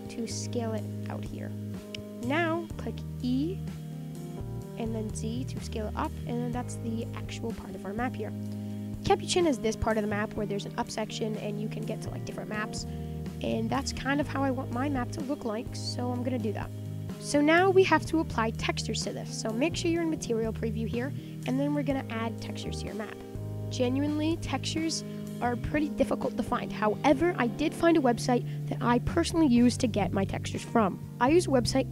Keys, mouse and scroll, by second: 0.2 Tab, 0.3-1.8 middle drag, 1.8 Tab, 1.8-2.8 middle drag, 2.8 scroll down 1, 3.0-4.5 middle drag, 4.5 e, 5.9 Tab, 6.1-6.9 middle drag, 6.9-7.8 scroll up 9, 7.5 shift+middle drag, 7.8 scroll down 3, 8.0 middle click, 8.4-8.7 scroll down 4, 8.7-11.2 scroll up 3, 11.2-11.5 shift+middle drag, 11.5-12.7 scroll down 4, 12.7-15.3 middle drag, 15.3 scroll up 3, 15.4-16.4 middle drag, 16.4 scroll down 2, 16.6-20.8 middle drag, 21.1-22.5 shift+middle drag, 22.5 scroll up 3, 22.8-23.4 shift+middle drag, 23.4 click, 23.6-24.1 middle drag, 24.1 scroll up 1, 24.2 scroll down 5, 24.4-28.2 middle drag.